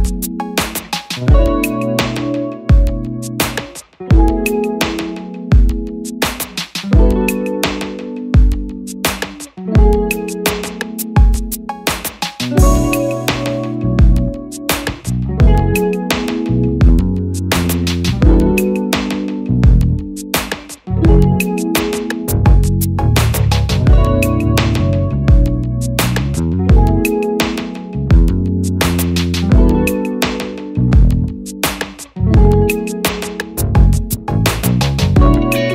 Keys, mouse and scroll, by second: 33.9 click.